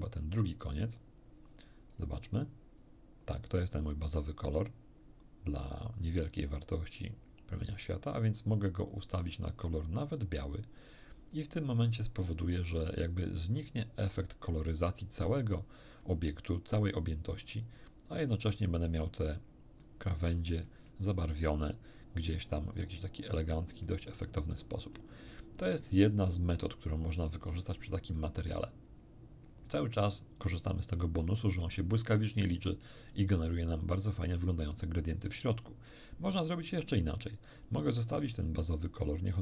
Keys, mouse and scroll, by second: 0.8 click, 1.9 click, 2.8-14.2 drag, 17.3-18.5 middle drag, 18.9 middle click, 19.8 middle click, 20.7 middle click, 22.9 middle click, 23.8 middle click, 24.6 middle click, 25.3 middle click, 26.1-27.1 middle drag, 27.2 middle click, 28.6 middle click, 33.0-33.7 scroll up 2, 37.5 click, 38.3 click, 39.3-39.4 drag.